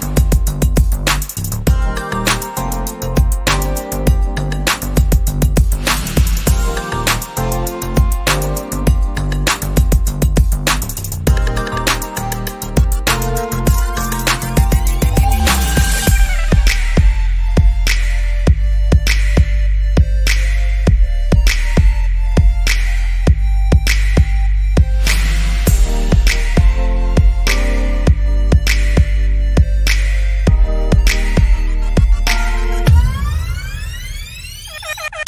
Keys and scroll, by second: 8.1 Down, 8.7 Down, 9.2 Down, 13.0 Down, 22.9 Down, 29.4 Down, 30.1 Right, 30.5 Left, 32.4 Down, 33.2 Down.